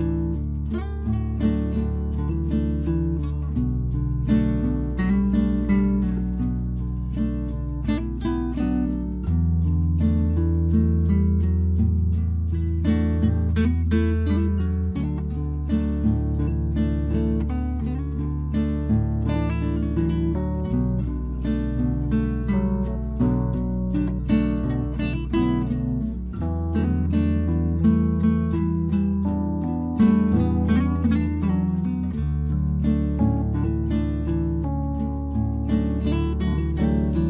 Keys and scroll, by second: 22.0 ctrl+j, 23.0 ctrl+t, 27.0 Return.